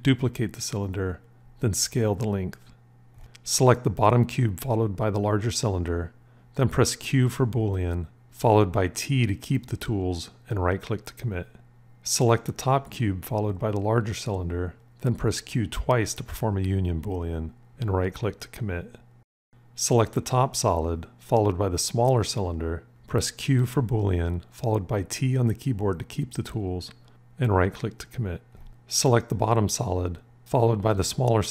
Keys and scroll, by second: 0.8 s, 7.0 q, 8.7 t, 15.5 q, 15.6 q, 23.4 q, 24.3 t.